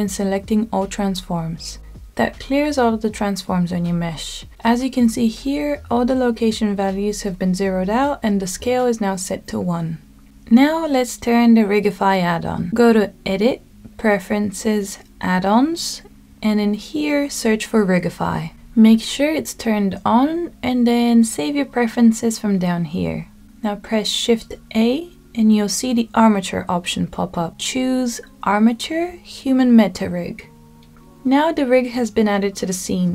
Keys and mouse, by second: 8.2-9.3 middle drag, 10.6-14.1 drag, 27.7 shift+a.